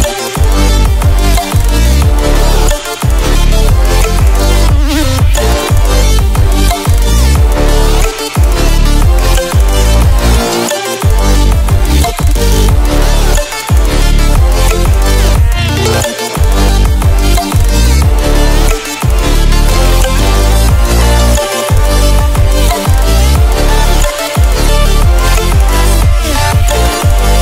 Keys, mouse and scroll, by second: 2.8 Left, 4.4 click, 6.2 ctrl+alt+scroll up 1, 7.0 click, 7.8 Left, 8.4 Right, 9.0 click, 9.9 ctrl+alt+scroll down 1, 10.9 click, 11.5 ctrl+alt+scroll down 1, 12.6-22.1 drag, 23.0 shift+click.